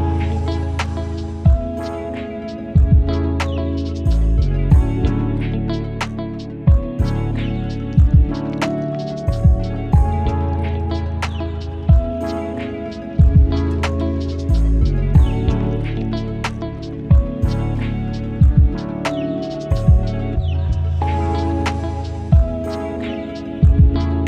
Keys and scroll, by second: 0.8 ctrl+alt+t, 5.9 Up, 6.0 Up, 6.1 Up, 6.2 Down, 6.4 Left, 6.5 Down, 6.6 Down, 7.0 Left, 9.4 b, 19.6 ctrl+alt+z.